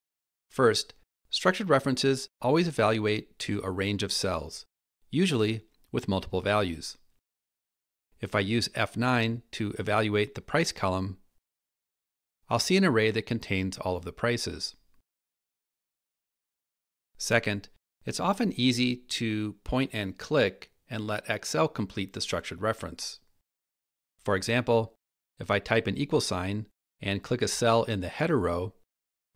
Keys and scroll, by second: 8.4 F9, 16.9 Escape.